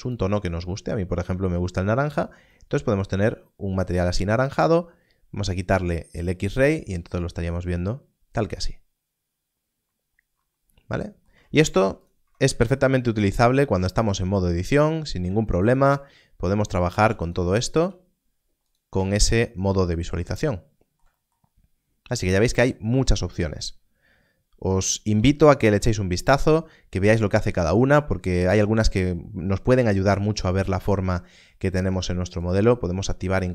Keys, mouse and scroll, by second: 12.2 Tab, 13.8-14.2 scroll up 1, 15.8 scroll up 1, 17.2 click, 17.7 g, 18.6 right click, 18.9 Tab, 19.2 scroll down 1, 26.3 click, 32.4 click.